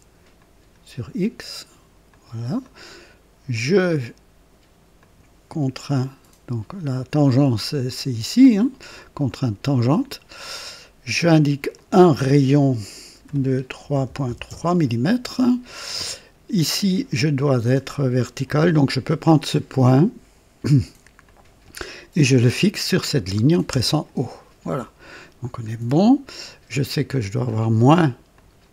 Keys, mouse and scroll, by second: 0.4 click, 2.1 click, 2.6 right click, 3.5 click, 5.0 click, 9.3 click, 11.7 click, 13.1 r, 13.8 KP_3, 14.0 KP_Decimal, 14.2 KP_3, 14.5 KP_Enter, 19.5 click, 21.2 click, 23.7 o, 24.8 right click, 25.5 scroll down 1, 25.9 right click, 28.3 click.